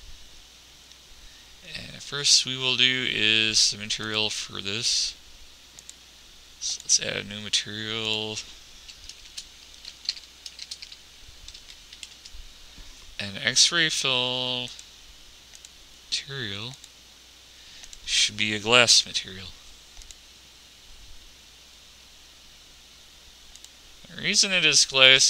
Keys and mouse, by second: 0.0 Escape, 10.4-15.1 middle drag, 15.1 click.